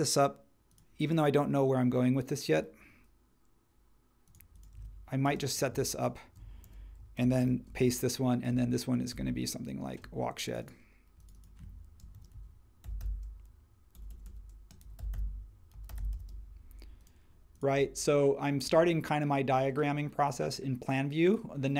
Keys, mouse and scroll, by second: 4.7 super+z, 5.2 space, 6.6 super+g, 7.2 super+c, 7.4 super+v, 11.9-16.6 typing.